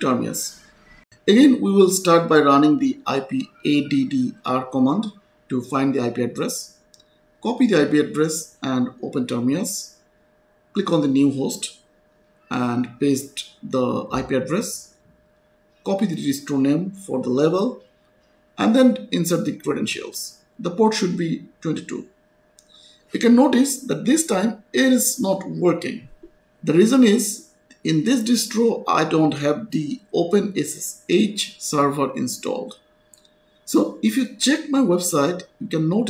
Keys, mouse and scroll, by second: 1.1 click, 2.4-3.5 typing, 3.7 Return, 6.2 click, 8.4 right click, 11.4 click, 13.0 ctrl+v, 14.0 click, 16.4 click, 17.7 right click, 18.0 click, 18.5-20.1 typing, 18.5 click, 20.6-21.6 scroll down 1, 21.6-22.1 scroll up 1, 22.1 click, 22.3 2, 23.1-24.0 scroll down 1, 24.2 click, 28.0 click, 33.2-33.8 scroll down 1, 35.3 click.